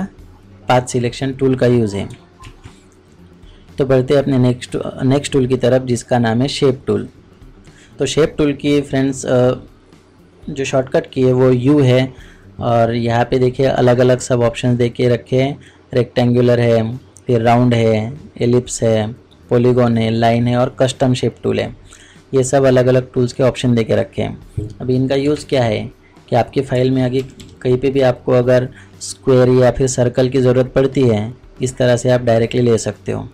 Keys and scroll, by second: 2.4 ctrl+Tab, 25.4 ctrl+Tab.